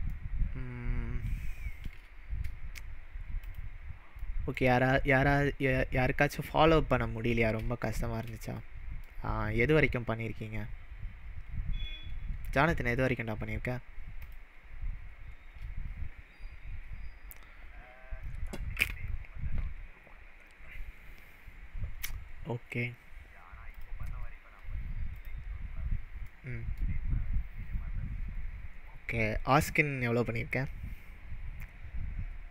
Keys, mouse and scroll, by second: 0.2-1.9 shift+middle drag, 3.4 click, 4.2-4.7 middle drag, 7.2-7.9 scroll down 2, 7.9-8.4 shift+middle drag, 14.2 click, 23.7 click, 25.1 click, 26.3-26.8 middle drag.